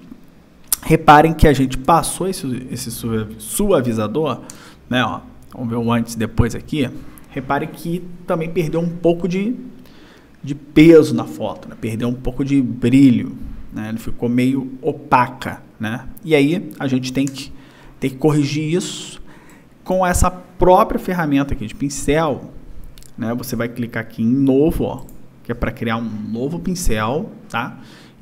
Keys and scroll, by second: 1.2 space, 4.5 y, 17.3 y.